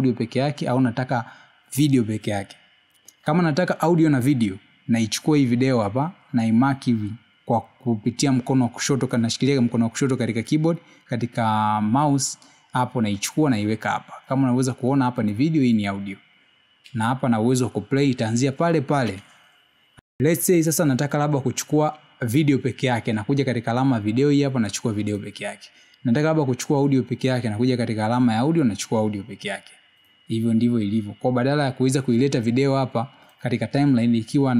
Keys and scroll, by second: 20.4 space.